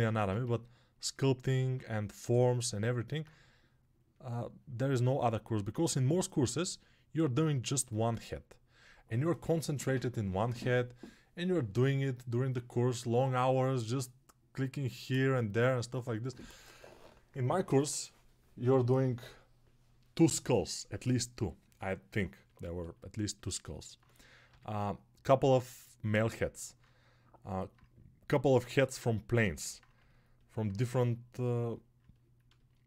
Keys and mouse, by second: 3.1-32.8 ctrl+drag.